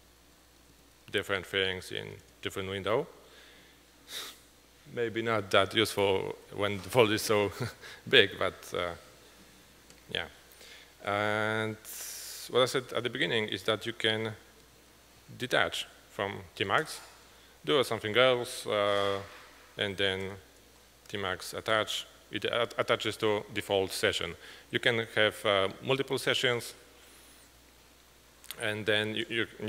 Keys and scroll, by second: 0.0-2.6 typing, 1.6 alt+Right, 15.2 typing.